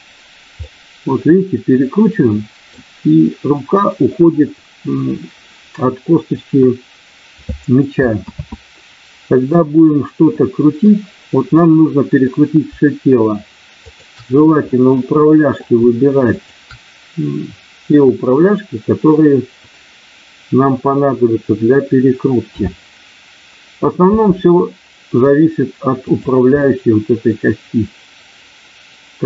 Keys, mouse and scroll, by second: 0.6-2.9 middle drag, 8.2 ctrl+z, 10.4 middle click, 11.6 middle click, 14.7 middle click, 16.4 shift+click, 22.5 KP_7, 24.1 r, 26.1 click, 26.6-29.2 middle drag.